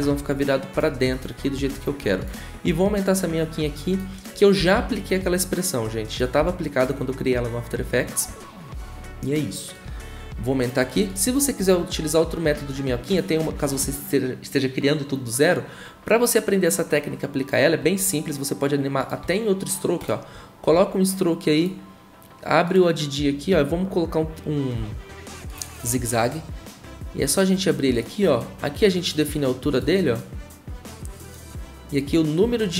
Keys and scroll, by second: 0.0-0.2 typing, 1.7 `, 4.5-5.2 typing, 6.4 e.